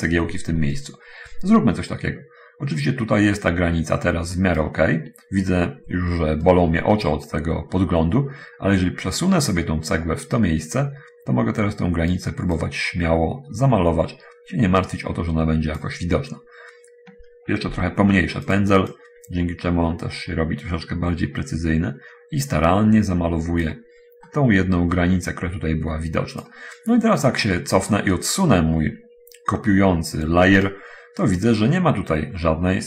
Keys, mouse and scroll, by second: 0.6-5.1 right drag, 6.7-12.6 right drag, 12.6-16.2 drag, 16.3-16.9 scroll up 2, 18.0 f, 19.1-24.0 drag, 24.5 middle click, 25.5-26.9 drag, 27.7 middle click, 28.2 scroll down 2, 28.5-30.7 right drag.